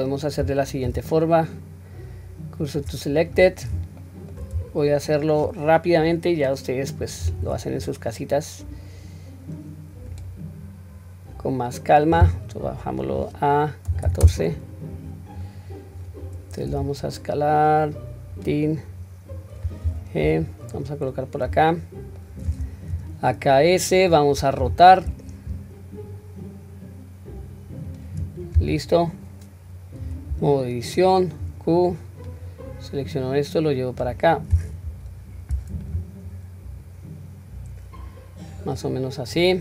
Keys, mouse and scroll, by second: 1.0 shift+s, 3.4-3.9 scroll up 2, 4.0 shift+middle drag, 7.3 shift+a, 11.0 scroll down 1, 13.1-14.3 drag, 13.1-13.9 scroll down 1, 15.7-16.1 scroll down 1, 16.7 s, 18.9-19.9 scroll up 1, 19.9-20.4 scroll up 1, 19.9 g, 21.1-21.5 scroll up 1, 21.7-22.2 shift+middle drag, 22.9 s, 24.6 r, 28.4-30.0 scroll up 1, 30.0 Tab, 30.0-31.1 scroll up 1, 31.4 q, 31.9 click, 33.1-34.1 drag, 34.9 o, 35.5 click, 36.9-38.5 drag, 38.8-39.6 middle drag.